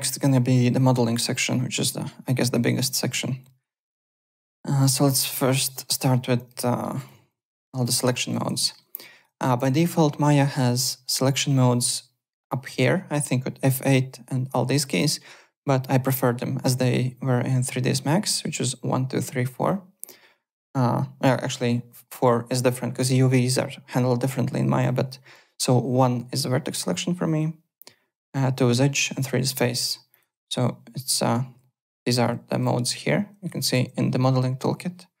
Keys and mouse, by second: 4.9 click, 5.2 alt+click, 5.4 alt+right click, 5.6 alt+middle click, 5.8 alt+click, 6.1 `, 6.6 alt+middle click, 6.9 alt+click, 7.3-8.8 typing, 8.1 click, 8.6 middle click, 8.8 alt+right click, 9.0 alt+click, 9.7 alt+Tab, 11.1 alt+click, 29.6 alt+Tab, 30.1 alt+click, 30.8-34.2 typing.